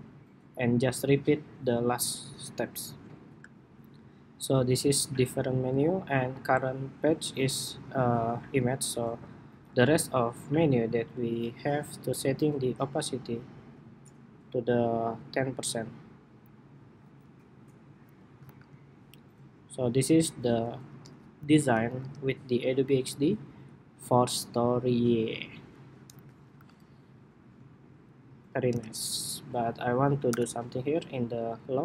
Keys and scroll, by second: 19.0 super+-, 21.5 super+=, 22.0 super+-, 25.8 super+=, 26.6 super+-, 27.3 super+-, 28.8 super+=, 30.0 super+=.